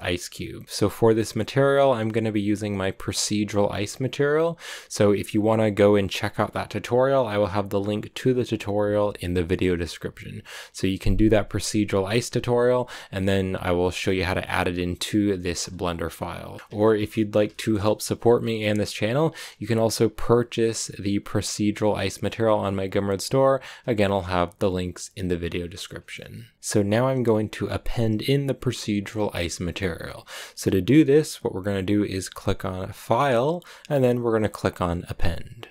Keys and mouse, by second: 0.2 shift+middle click, 16.6 shift+middle click, 17.3 shift+middle click, 33.0-35.7 drag.